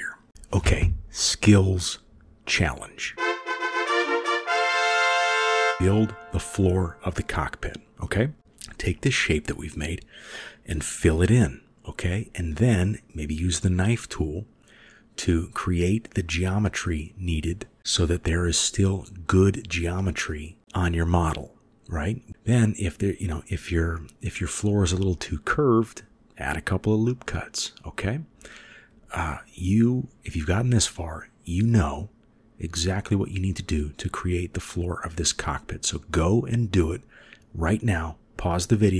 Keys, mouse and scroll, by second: 8.8 KP_7, 8.8-10.6 middle drag, 12.1 middle click, 17.3-20.0 drag, 20.7-23.4 drag, 23.7 ctrl+r, 25.8 ctrl+r, 31.7 ctrl+r, 34.4-36.1 middle drag.